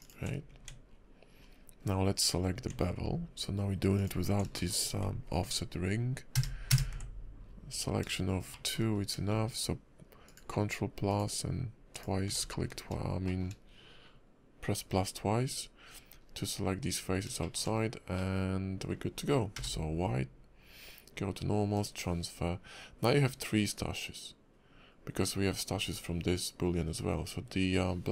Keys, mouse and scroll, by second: 0.5 Tab, 0.9-1.4 scroll down 4, 1.4 scroll up 1, 1.8 scroll down 2, 1.9-2.3 scroll up 6, 2.6 Tab, 3.9 alt+click, 4.5 shift+middle click, 6.3 ctrl+KP_Add, 6.7 ctrl+KP_Add, 7.4 scroll down 3, 7.7 scroll up 5, 8.5 shift+middle click, 8.8-9.2 scroll up 2, 10.2 alt+shift+click, 11.1 alt+shift+click, 12.4-12.7 scroll down 8, 13.2 shift+middle click, 14.8-15.3 scroll up 3, 15.9-16.3 scroll down 5, 16.9-17.2 scroll up 4, 17.4 shift+middle click, 17.7 scroll down 1, 18.1 middle click, 19.6 y.